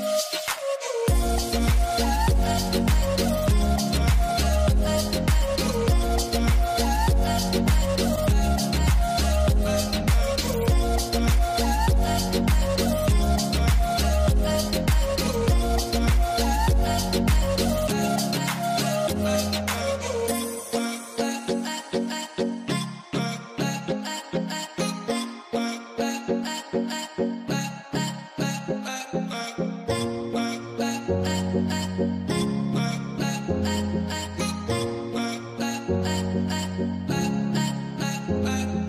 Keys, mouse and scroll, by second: 1.1 double click, 5.2 alt+scroll, 5.3 alt+scroll down 1, 6.6 double click, 7.3 alt+scroll, 8.7 ctrl+click, 15.1 ctrl+z, 16.2 b, 18.0 middle click, 18.4 ctrl+z, 20.6 ctrl+y, 22.0 right click, 24.5 right click, 26.0 ctrl+z, 27.4 double click, 35.9 double click, 36.1 ctrl+0.